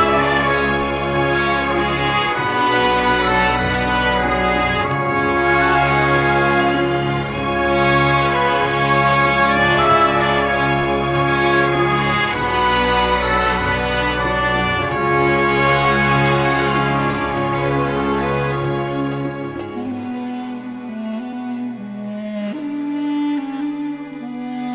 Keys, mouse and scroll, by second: 0.7 click, 2.4 click, 3.8 8, 5.0 ,, 5.3 3, 6.4 click, 7.1 scroll up 1, 7.6-7.9 scroll down 1, 8.9 click, 10.2 1, 10.8 0, 11.5 click, 12.5 scroll up 1, 14.9 click, 16.1 click, 16.7 scroll up 1, 17.3-17.6 scroll down 2, 19.8 click, 21.1 click, 22.5 click, 23.5 3, 24.0 0.